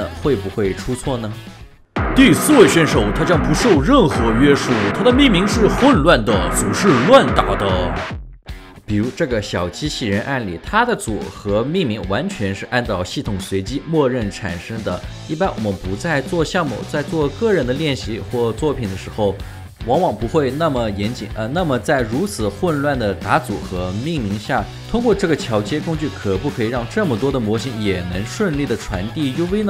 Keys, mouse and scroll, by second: 8.4 ctrl+alt+shift+4, 10.1 double click, 15.7 alt+right click, 16.2 scroll down 1, 16.8 alt+right click, 19.4 alt+click, 24.9 alt+click, 25.9 alt+middle click, 26.3 alt+click, 28.5 double click, 29.5 scroll down 1.